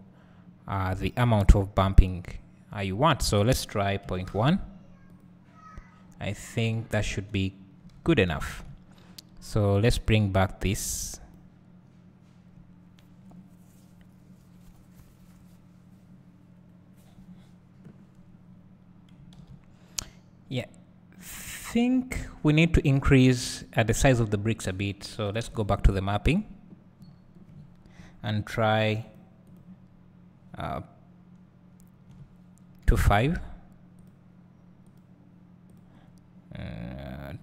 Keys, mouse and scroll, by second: 6.1-7.2 scroll down 2, 7.2 KP_0, 10.1-21.0 drag, 18.1-18.7 scroll up 2, 21.8 scroll down 2, 25.6 click.